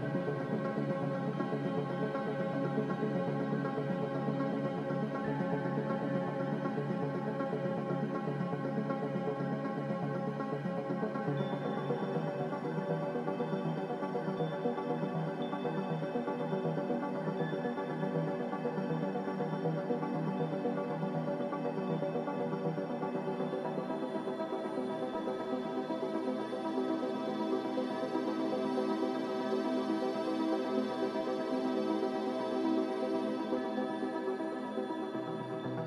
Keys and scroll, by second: 6.1 5, 6.5 Return, 11.1 g, 19.5 z, 21.4-22.2 typing, 26.0-26.7 typing.